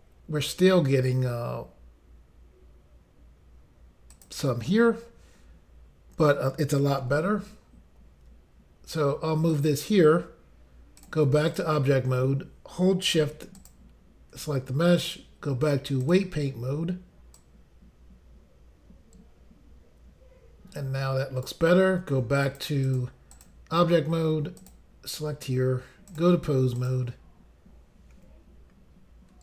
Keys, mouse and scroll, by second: 4.1 click, 9.5 click, 9.7 click, 11.0 click, 11.1 click, 11.5 click, 11.6 click, 13.6 shift+click, 13.7 shift+click, 15.0 click, 15.2 click, 16.0 click, 16.1 click, 17.4 click, 22.4 click, 22.6 click, 22.9 click, 23.3 double click, 23.5 double click, 24.6 click, 24.7 click, 26.2 click, 26.8 click, 26.9 click, 28.2 r.